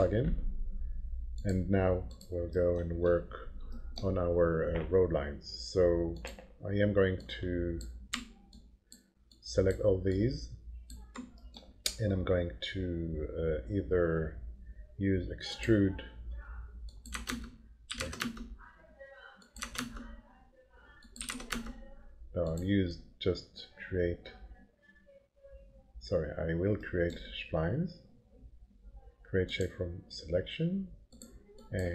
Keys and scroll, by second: 17.2-18.6 typing, 17.3 Return, 19.6 0, 19.8 Return, 20.9-21.8 typing.